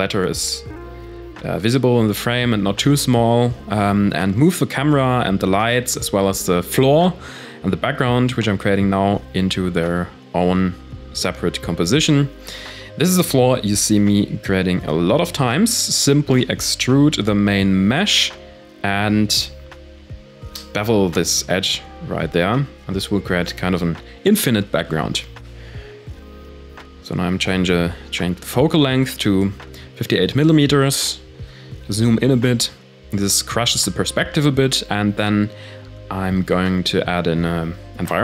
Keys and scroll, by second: 2.3 Return, 4.2 shift+a, 6.3 s, 6.9 Tab, 7.5 Tab, 9.4 s, 10.2 Tab, 10.6 alt+KP_2, 11.5 e, 12.3 Tab, 12.6 ctrl+a, 13.1 Tab, 14.2 ctrl+b, 16.3 Tab, 17.8 KP_0, 19.3 ctrl+b, 20.4 ctrl+s.